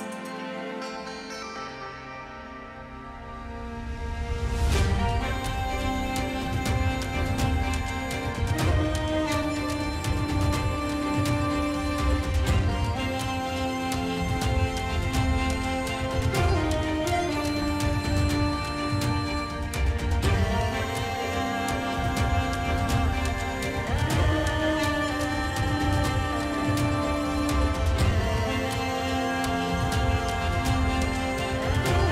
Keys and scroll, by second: 0.0-0.8 typing, 1.8 0, 4.5 ctrl+e, 7.0-9.1 typing, 8.3 ctrl+alt+z, 10.5 [, 11.5 space, 12.7 ], 16.3 F9, 19.4 [, 21.3 ], 22.6 space, 23.0 [, 30.3 space, 30.8 ], 30.8 space.